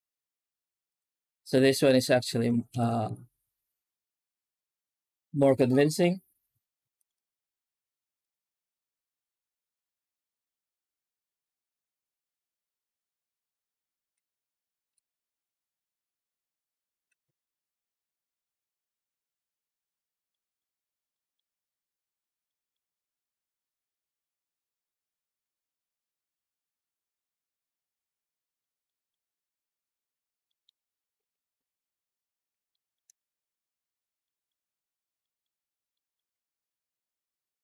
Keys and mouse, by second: 2.6 ctrl+s, 2.9 z, 6.8 click, 8.0-14.4 drag, 16.9 click, 20.2 middle click, 21.0 middle click, 21.6 middle click, 22.3 middle click, 25.8 click, 28.7 middle click, 30.3 middle click, 32.5 shift+middle click, 33.0 middle click, 34.1 middle click, 35.1 middle click, 35.7 middle click, 36.2 z, 37.5 ctrl+space.